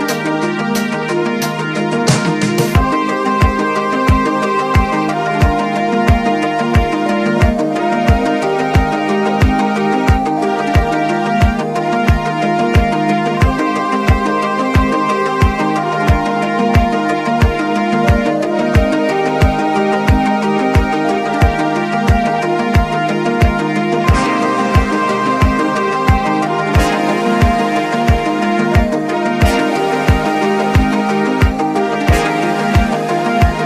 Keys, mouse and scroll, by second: 1.8 click, 5.6 click, 8.0 click, 12.4 click, 14.1 click, 16.7 click, 18.6 click, 21.1 click, 22.7 click, 24.4-26.6 drag, 26.6 click, 29.0 click, 30.3 click, 30.9 click, 32.2 click, 32.9 0.